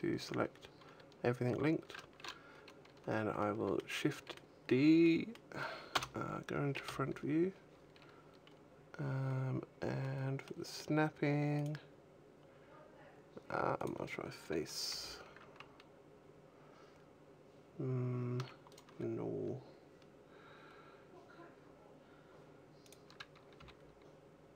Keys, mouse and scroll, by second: 3.2 middle click, 4.0 middle click, 4.9 middle click, 5.8 KP_1, 5.8 KP_2, 5.8 KP_0, 6.7 KP_1, 8.3-8.8 scroll up 3, 9.2-9.9 scroll down 2, 9.9 middle click, 11.4 click, 14.7 g, 18.6 right click, 22.7 click, 23.4 g.